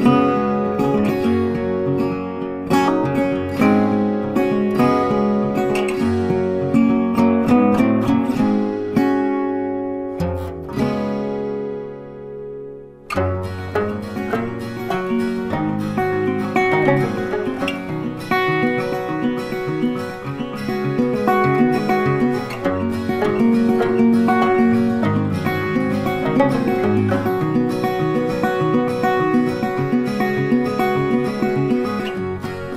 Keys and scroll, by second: 0.6 ctrl+t.